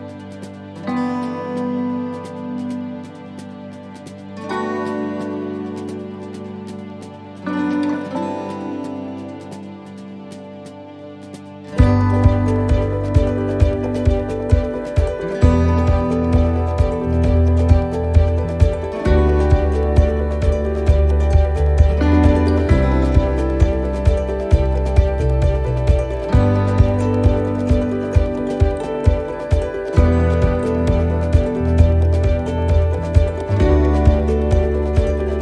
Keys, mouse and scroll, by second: 3.7 click, 3.7 middle click, 4.1-4.6 scroll down 1, 4.6 middle click, 5.2 scroll up 1, 6.6 middle click, 7.3 right click, 8.6 l, 10.9 click, 12.6 right click, 13.7 l, 14.5 click, 17.6-18.2 scroll down 1, 18.4 middle click, 19.4 right click, 20.2 l, 21.0 click, 22.3 right click, 22.7 l, 23.5 click, 24.9 right click, 25.2 l, 26.3 click, 27.8 middle click, 28.7-29.0 scroll up 1, 29.2 scroll down 1, 30.5-30.8 scroll up 1, 31.2 middle click, 32.6-33.1 scroll down 1, 33.1 middle click, 34.2 a.